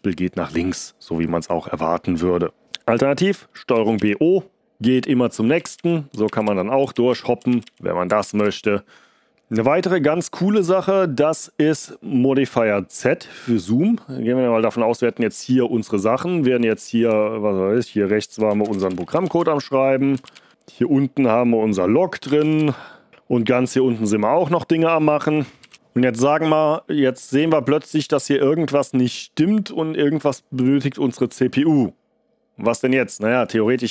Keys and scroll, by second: 3.7 ctrl+b, 3.9 o, 4.5 ctrl+b, 4.5 o, 5.5 ctrl+b, 5.7 o, 6.2 ctrl+b, 6.4 o, 6.9 ctrl+b, 7.0 o, 7.4 ctrl+b, 8.4 o, 16.8 ctrl+b, 17.0 Right, 18.1-20.6 typing, 21.9-23.5 typing, 24.9-26.2 typing.